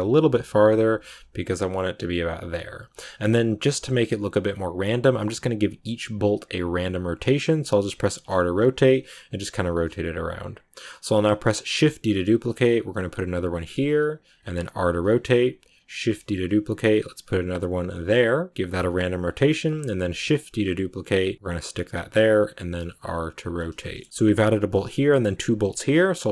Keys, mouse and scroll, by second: 11.3 shift+d, 14.5 r, 15.9 shift+d, 18.5 r, 19.2 g, 19.9 shift+d, 22.1 r, 23.7-26.1 shift+middle drag, 26.1 shift+d.